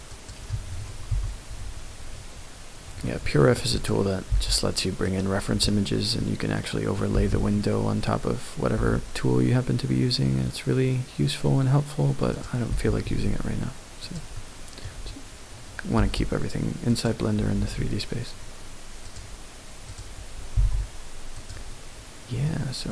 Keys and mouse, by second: 0.2 click, 1.1 KP_1, 3.3 shift+click, 3.7 middle click, 4.3 r, 5.0 right click, 5.6-6.2 middle drag, 6.6-6.9 middle drag, 7.1 r, 7.3 x, 8.7 r, 12.3 middle click, 12.7 r, 13.0 x, 14.0 click, 14.3-14.8 middle drag, 15.9 r, 16.9 click, 17.3 r, 17.6 x, 19.1 click, 20.5 g, 20.6 z, 21.4 click, 22.4 middle click.